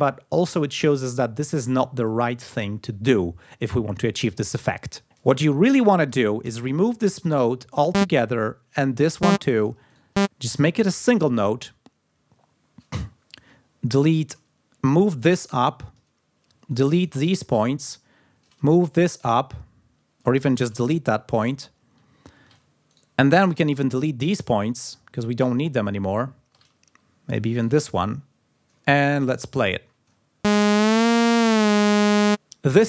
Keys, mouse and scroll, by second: 1.6 ctrl+scroll down 2, 5.0 space, 6.0 e, 6.7 shift+right click, 7.8 click, 9.1 shift+click, 9.4 shift+right click, 9.7 shift+middle click, 10.0 shift+click, 14.3 middle click, 14.4-15.7 drag, 16.2 shift+right click, 16.4 shift+middle click, 16.6 shift+right click, 17.9-20.2 drag, 20.0 shift+right click, 20.4-20.7 ctrl+shift+scroll up 2, 21.2 ctrl+scroll down 2, 21.8 ctrl+scroll up 2, 22.4 ctrl+shift+right click, 22.8 ctrl+shift+right click, 23.1 ctrl+shift+scroll down 1, 23.7-24.0 ctrl+scroll up 1, 24.5 ctrl+scroll down 1, 25.0-25.3 ctrl+scroll up 2, 25.6 ctrl+scroll down 2, 25.8 ctrl+scroll up 2, 27.1 shift+right click, 27.4-27.9 ctrl+shift+scroll down 3, 28.5 ctrl+scroll up 2, 29.0 ctrl+scroll down 2, 30.0 space.